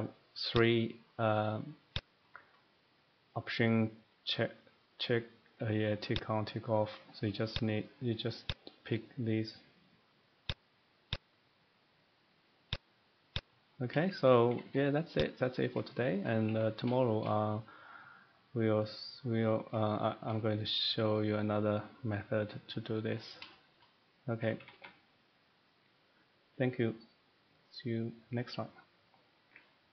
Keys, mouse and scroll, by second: 0.8 click, 2.2 click, 6.9 click, 7.6 click, 8.5 click, 10.5 click, 11.1 click, 12.7 click, 13.3 click, 13.8 middle click, 14.2 shift+middle click, 14.5 Escape, 14.6 Escape, 15.1 click, 15.4 scroll, 15.7 middle click, 16.2 shift+middle click, 16.5 Escape, 16.6-17.0 scroll, 17.3 shift+middle click, 17.7-18.3 scroll, 18.7 shift+middle click, 19.4 middle click, 20.2 shift+middle click, 21.1 middle click, 23.1 middle click, 23.5 middle click, 23.9 shift+middle click, 24.4 middle click, 24.6 Escape, 24.7 Escape, 25.7 middle click.